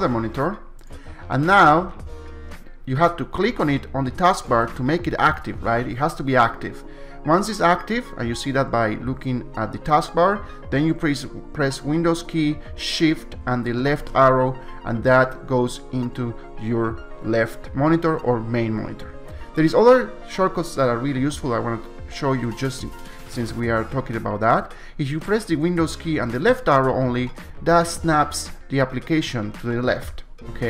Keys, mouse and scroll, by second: 0.9 click, 4.5 click, 12.2 click, 13.8 super+Left, 26.5 super+Left.